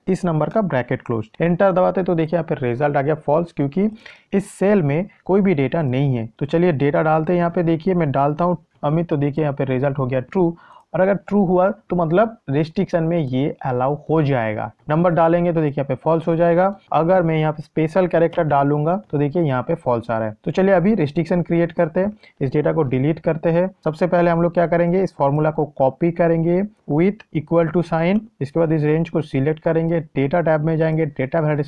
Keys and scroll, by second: 27.3 ctrl+c.